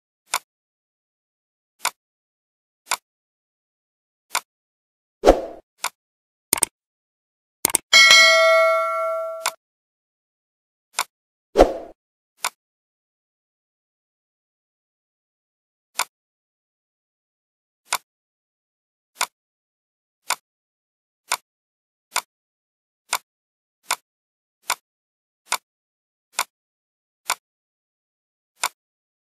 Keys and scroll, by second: 8.0 Down.